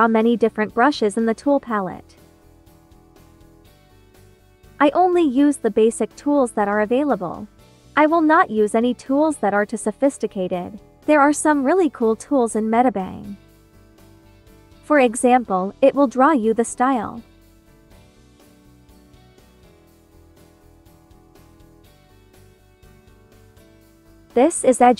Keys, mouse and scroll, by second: 5.3 ctrl+d, 11.3 click, 13.8-16.3 drag, 16.3 b, 16.9 click, 17.8 ctrl+z, 19.9-23.6 drag, 23.6 ctrl+z.